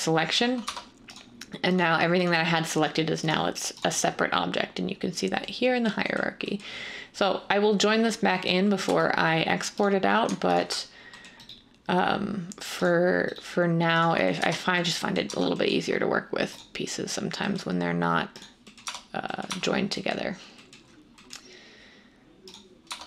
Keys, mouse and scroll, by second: 0.6 Tab, 8.8 Tab, 14.4 Tab, 15.2 Tab, 18.8 Tab, 19.4 Tab, 22.8 Tab.